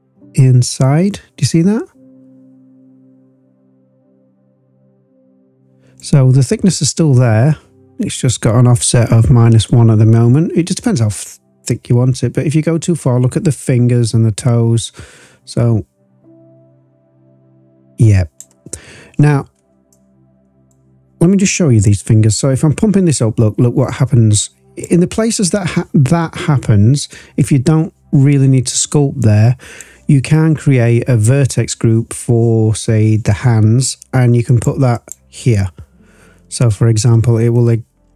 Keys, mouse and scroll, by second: 8.7-18.4 drag, 19.9 click, 21.8-24.8 drag, 28.7-29.8 drag, 34.5 click, 34.9-38.1 drag.